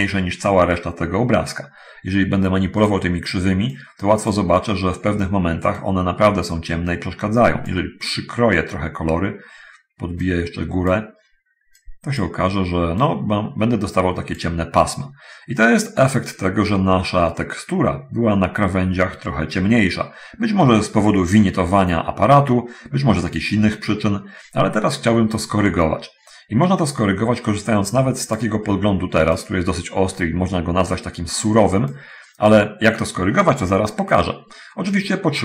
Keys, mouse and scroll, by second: 2.7 click, 4.0 click, 5.7-8.1 drag, 10.1-11.3 drag, 11.7 click, 13.1-14.8 drag, 28.1 click, 29.6 click, 32.1 click, 34.5 middle click, 35.2 middle click.